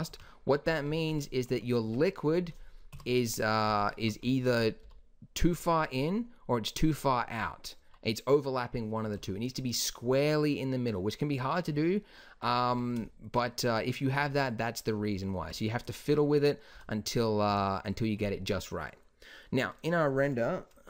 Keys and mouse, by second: 0.0 Escape, 0.8 z, 1.8 Tab, 2.8 KP_1, 4.7 s, 11.7-16.8 middle drag, 12.6 Tab, 16.7 s.